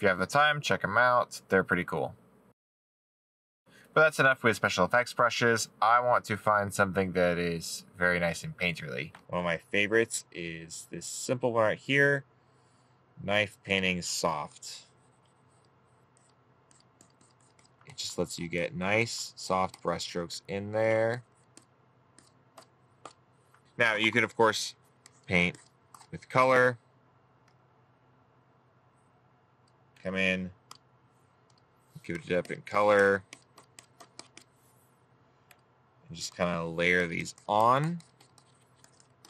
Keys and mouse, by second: 0.4 middle click, 20.9 right click.